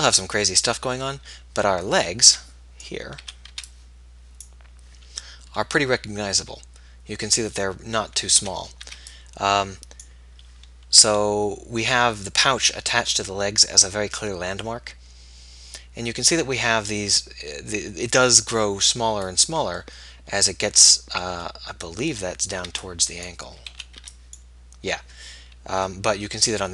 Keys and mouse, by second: 2.5 b, 3.4 a, 3.8 b, 22.5-23.7 middle drag, 22.9 b, 23.9 a, 24.3 b.